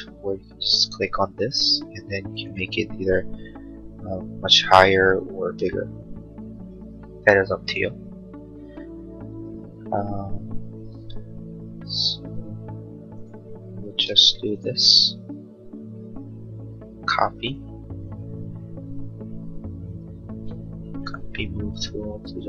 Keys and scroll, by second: 5.3 Escape, 7.4 space, 14.1 m.